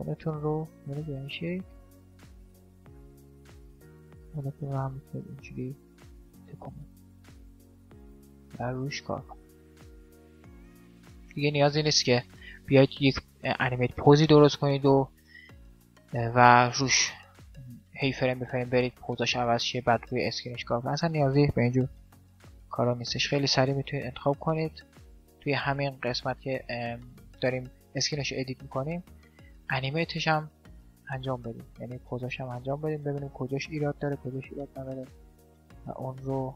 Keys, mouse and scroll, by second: 2.6 middle click, 3.3 r, 8.2 middle click, 9.3-11.5 drag, 11.5-12.8 middle drag, 12.9 middle click, 14.3-17.8 middle drag, 17.8-19.7 drag, 20.8-22.5 drag, 21.6 shift+Left, 22.5-24.3 middle drag, 23.3 r, 24.3 right click, 24.5-25.9 drag, 26.2-28.3 middle drag, 28.1 g, 29.5-34.5 middle drag, 30.1 g, 31.7 g, 33.1 g.